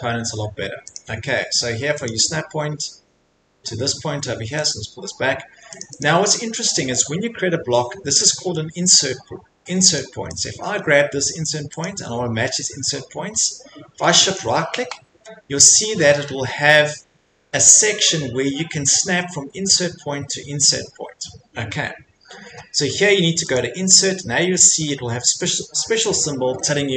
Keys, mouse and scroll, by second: 0.9 click, 2.0 click, 4.6 click, 5.5 Escape, 5.8 click, 6.0 click, 9.0 Escape, 9.6 Escape, 10.0 click, 10.4 click, 11.8 click, 14.3 shift+right click, 23.5 click, 25.5 click, 26.1 middle click, 26.2 middle click, 26.9 middle click.